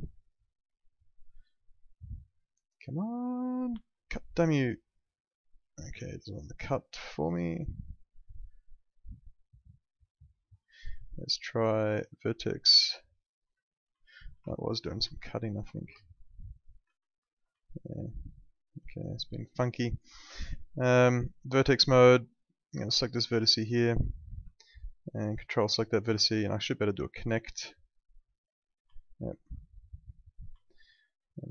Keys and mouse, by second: 6.0 alt+middle click, 11.6 click, 12.9 alt+middle click, 13.9 alt+middle click, 14.4 ctrl+z, 15.1 alt+middle click, 15.9 ctrl+z, 16.4 alt+middle click, 17.0 ctrl+z, 17.6 alt+middle click, 20.5 click, 23.4 alt+middle click, 25.1 ctrl+click, 25.6 alt+middle click, 26.6 click, 28.9 alt+middle click, 30.3 click, 30.6 alt+middle click.